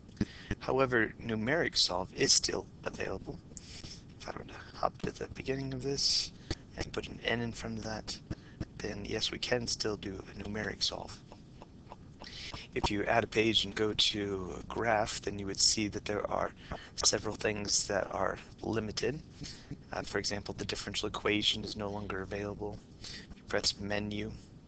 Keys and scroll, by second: 0.0-0.8 typing, 14.7-15.4 typing, 23.9 Menu, 23.9 Down, 23.9 Right, 23.9 Escape.